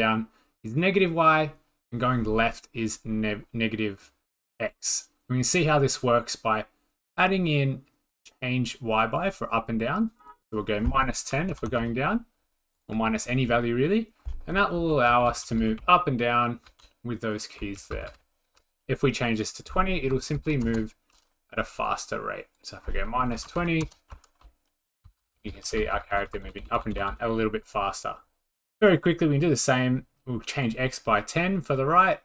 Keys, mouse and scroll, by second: 9.1 drag, 10.5-10.9 drag, 11.2 click, 11.4-12.3 typing, 11.7 click, 12.8-13.8 drag, 14.7 Up, 15.0 Up, 15.2 Up, 15.4 Up, 15.6 Up, 15.8-16.6 Down, 17.3 Up, 17.8 Down, 17.9 Down, 18.1 Down, 19.4 click, 19.9 scroll down 3, 20.1-20.9 typing, 20.4 click, 22.6-24.7 drag, 23.1-24.1 typing, 24.4 Up, 24.9 Up, 25.1 Down, 25.2 Down, 25.6 Down, 25.8 Down, 25.9 Down, 26.1 Up, 26.1 Down, 26.3 Up, 26.5 Up, 26.6 Up, 26.8 Up, 26.9 Up, 27.1 Up, 31.6-32.2 drag.